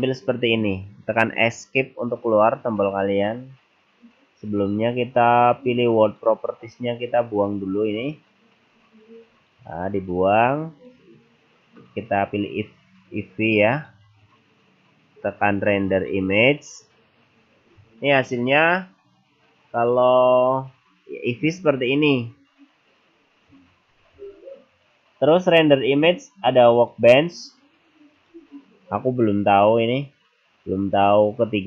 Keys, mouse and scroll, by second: 6.0 click, 9.4 click, 10.7 click, 14.0 click, 25.5 click, 28.2 click.